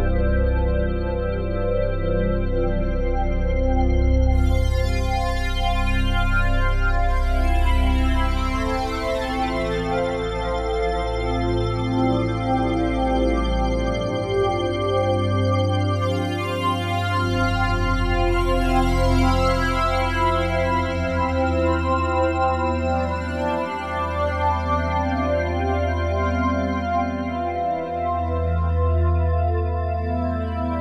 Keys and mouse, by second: 0.5 alt+click, 1.0 ctrl+alt+click, 1.8 click, 2.8 click, 3.5-5.3 typing, 8.2 click, 10.8-15.2 drag, 15.2 1, 15.6 ctrl+s, 16.9 click, 17.8 click, 18.5 click, 19.6 ctrl+s, 21.6 click, 23.8 click, 26.4 ctrl+alt+click, 28.1 shift+click, 28.7 shift+click, 29.6-30.8 shift+drag.